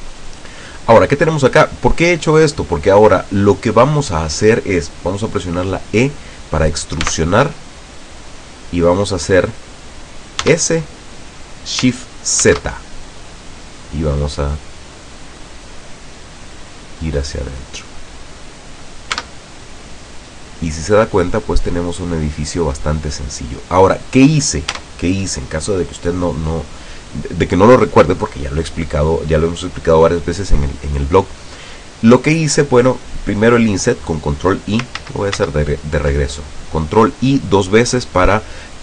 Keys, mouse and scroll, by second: 0.3-4.3 middle drag, 7.2 e, 10.6 s, 12.6 shift+z, 17.2 click, 17.7-18.7 middle drag, 19.2 Tab, 19.8-20.1 scroll down 2, 20.2-23.6 drag, 23.6-24.2 scroll up 1, 24.8 Tab, 35.1 ctrl+z.